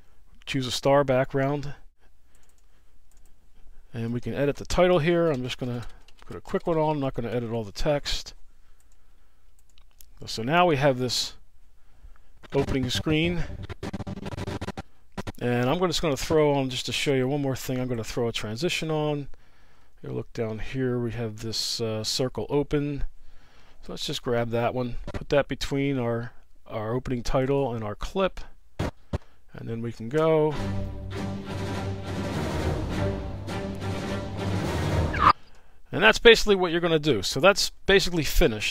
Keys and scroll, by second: 6.3 space, 9.3 space, 33.1 space, 35.3 space, 38.3 space.